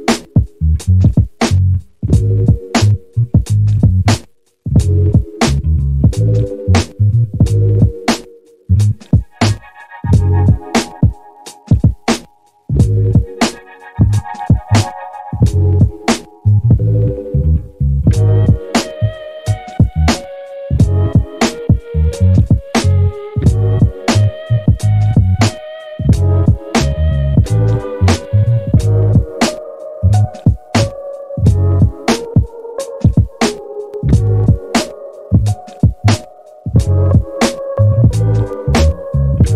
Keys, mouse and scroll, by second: 9.0-10.4 scroll down 7, 10.5-17.1 drag, 18.3 click, 18.9 g, 29.4-37.9 drag, 38.2 middle click.